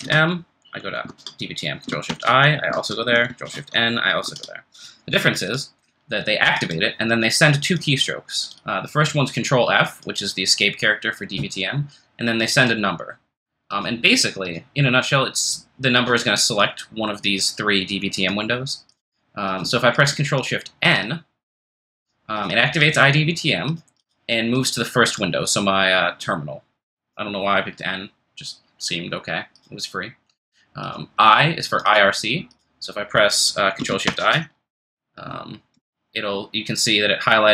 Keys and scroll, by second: 1.1 super+Tab, 2.1 ctrl+f, 2.7 super+Tab, 2.7 2, 3.3 ctrl+f, 3.4 1, 4.2 super+Tab, 34.1 ctrl+f, 34.2 2.